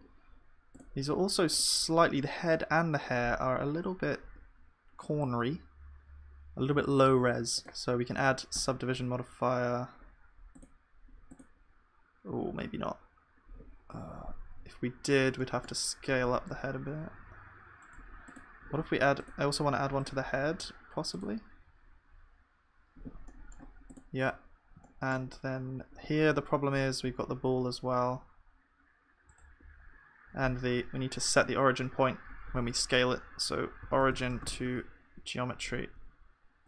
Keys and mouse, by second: 14.9-19.6 middle drag, 16.3 KP_1, 17.1 s, 19.6-22.5 drag, 23.3-27.4 middle drag, 24.9-27.4 drag, 27.4 s.